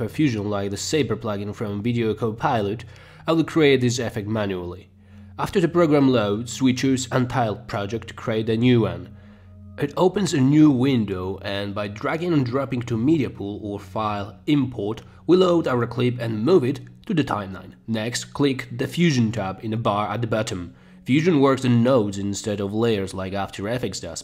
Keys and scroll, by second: 15.5 space.